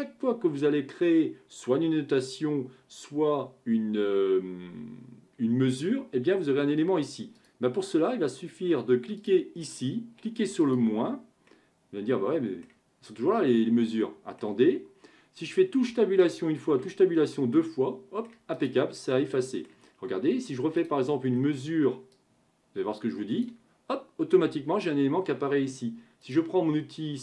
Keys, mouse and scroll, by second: 7.4 click, 9.2 click, 10.6-11.5 drag, 11.5-15.9 middle drag, 15.9 Tab, 16.7 Tab, 17.4-18.5 middle drag, 18.5 click, 19.0-20.8 middle drag, 20.8 click, 21.2-22.1 scroll up 2, 22.1 click, 26.2-27.2 drag.